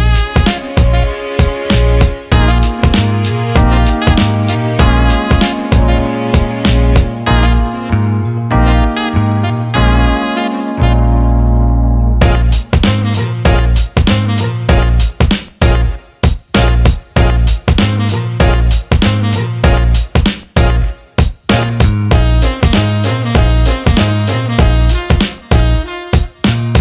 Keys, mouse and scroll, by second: 0.2 click, 0.8 alt+middle click, 1.7-2.7 drag, 3.6 click, 6.8 click, 7.8-9.4 drag, 9.7 alt+middle click, 10.1 ctrl+alt+middle drag, 10.4 alt+shift+middle drag, 10.7-11.4 alt+middle drag, 11.6 alt+shift+middle click, 11.9-12.3 alt+middle drag, 12.4 alt+shift+middle click, 12.7 alt+middle click, 13.3 alt+shift+middle click, 13.7 alt+middle click, 14.0 alt+shift+middle click, 17.3 click, 18.5-19.6 drag, 20.8 click, 23.2 alt+middle drag, 23.7 alt+shift+middle drag, 25.2 click, 26.0-26.8 drag.